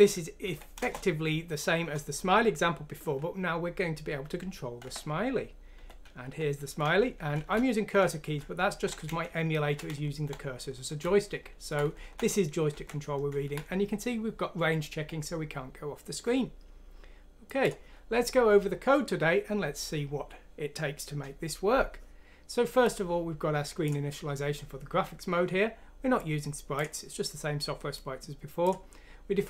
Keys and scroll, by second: 0.0 Up, 0.4 Down, 0.8 Return, 4.8 End, 5.7 End, 6.4 Right, 6.8 Down, 7.5 Down, 8.0 Right, 8.4 Down, 9.0 Left, 9.6 Down, 9.8 Down, 9.9 Down, 10.0 Up, 11.0 Up, 11.3 Right, 11.9 Right, 12.6 Left, 12.7 Left, 12.8 Left, 13.0 Right.